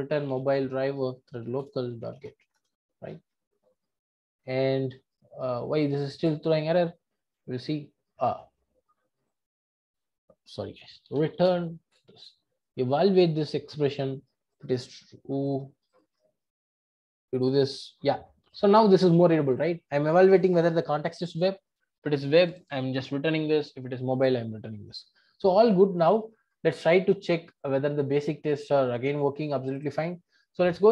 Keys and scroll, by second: 1.6 Return.